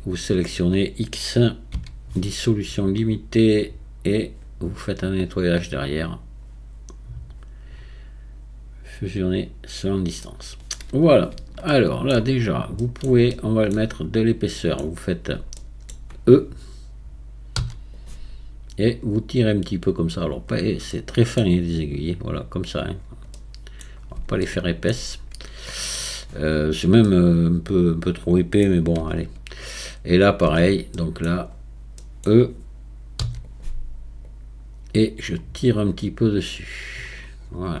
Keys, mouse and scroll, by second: 1.7 x, 5.9-9.1 drag, 10.2-11.3 middle drag, 11.3-11.7 scroll up 1, 11.7 shift+middle click, 12.1-12.8 scroll up 4, 12.8-14.0 middle drag, 14.0-14.5 scroll up 2, 14.5 middle click, 15.1-15.5 scroll up 1, 15.5-17.6 shift+middle drag, 17.6 e, 18.8-20.5 drag, 20.5-20.9 scroll up 1, 20.9-22.9 middle drag, 22.9-23.3 scroll down 4, 23.3 middle click, 23.9-24.4 scroll down 3, 24.4 shift+middle click, 24.9-26.1 scroll up 1, 26.1-27.0 scroll up 1, 27.0-29.0 middle drag, 29.0 Tab, 29.7 click, 30.5 Tab, 30.9 middle click, 31.5-32.0 scroll up 3, 32.0-33.2 middle drag, 33.2 e, 34.3-37.3 drag, 37.4-37.8 scroll down 4.